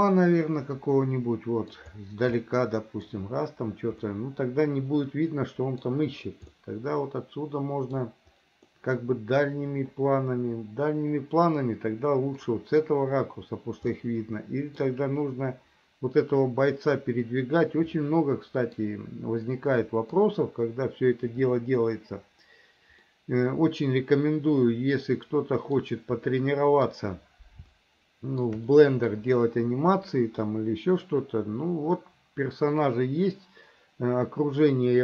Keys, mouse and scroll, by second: 2.4 middle click, 4.1-5.9 middle drag, 6.6-8.0 middle drag, 8.7-12.5 middle drag, 14.0 middle click, 18.0 middle click, 19.6 middle click, 23.1-25.9 middle drag, 26.4 middle click, 27.8 shift+middle click, 28.8 middle click.